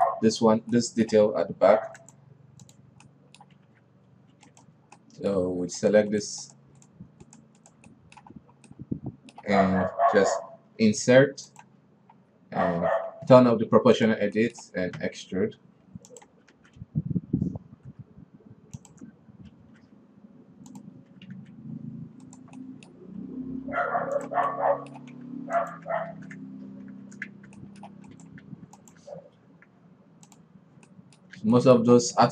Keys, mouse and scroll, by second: 0.0 alt+KP_3, 0.3-2.2 middle drag, 2.2 ctrl+r, 3.5-4.1 middle drag, 4.1 alt+a, 4.5 alt+KP_3, 4.9 right click, 5.4 right click, 5.4-6.2 middle drag, 6.2 shift+right drag, 6.6 shift+right click, 6.9 shift+right click, 7.3 shift+right click, 7.7 shift+right click, 8.1 shift+right click, 8.3-8.8 shift+middle drag, 8.8-9.2 scroll up 1, 9.2-11.1 middle drag, 14.4 drag, 14.8 middle click, 15.4 e, 17.0 alt+s, 20.1 s, 21.5 s, 23.1-23.6 middle drag, 23.6 g, 24.7 Tab, 25.0-25.7 middle drag, 25.7 ctrl+a, 26.3 Tab, 26.5 a, 27.3 shift+n, 27.7 Tab, 28.0-28.6 middle drag, 28.6 right click, 28.9 ctrl+a, 29.5 Tab, 29.9 Tab, 30.7 click, 31.3 middle click, 31.8 alt+a, 32.0-32.3 middle drag.